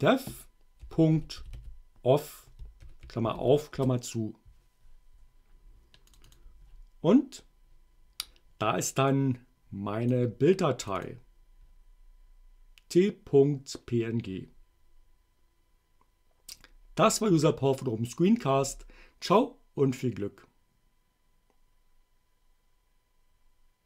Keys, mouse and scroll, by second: 0.0-3.6 typing, 3.8 shift+Return, 6.2 click, 9.2-10.3 drag, 10.9-13.5 drag.